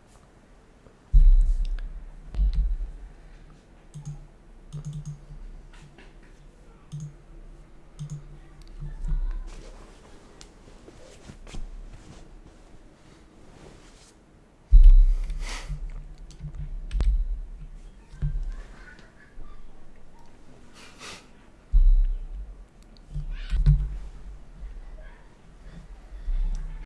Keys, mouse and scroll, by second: 3.9 click, 16.8 F8.